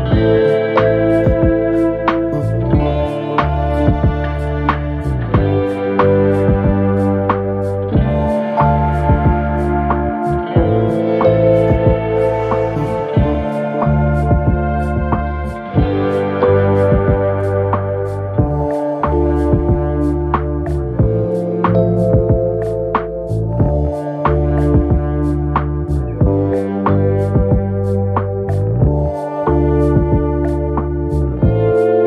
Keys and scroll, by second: 29.4 ctrl+z, 30.6 ctrl+a, 31.5 ctrl+z.